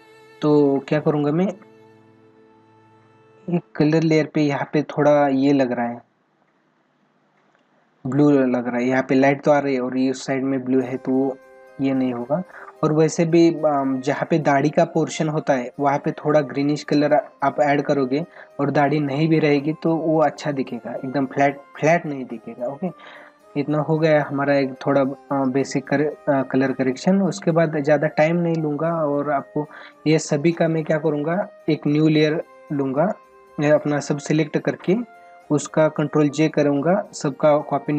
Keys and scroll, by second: 18.9 ctrl+=.